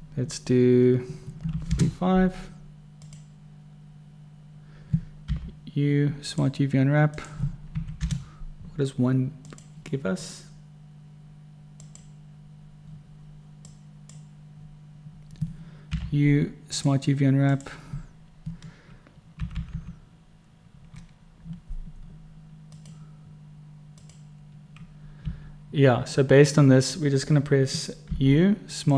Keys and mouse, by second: 5.6 u, 14.0 click, 16.2 u, 19.8 9, 20.0 9, 25.5 9, 28.4 u.